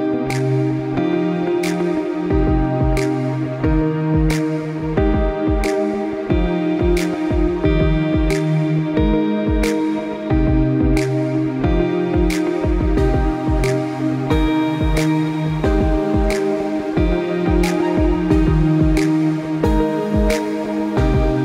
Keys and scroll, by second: 8.3 1, 8.5 Return, 12.8 p, 15.8 ., 17.6-18.2 typing, 18.6 Return.